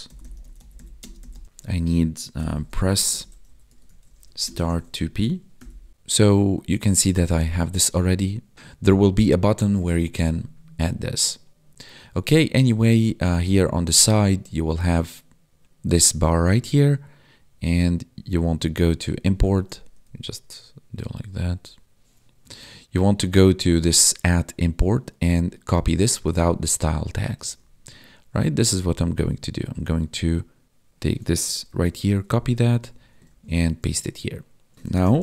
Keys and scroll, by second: 1.0 space, 3.0 space, 4.4 space, 31.6 ctrl+c, 32.6 ctrl+v, 33.2 ctrl+s, 34.7 ctrl+s.